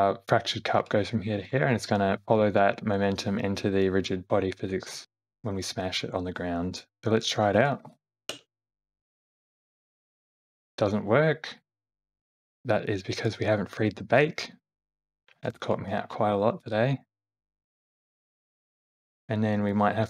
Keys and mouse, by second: 0.8 Right, 1.5 Left, 1.7 Right, 4.9 Right, 6.4 Left, 6.9 Left, 7.2 click, 7.9 shift+Left, 8.3 space, 10.1 space, 10.7 shift+Left, 16.5 space, 18.4 space, 18.7 shift+Left, 19.7 click.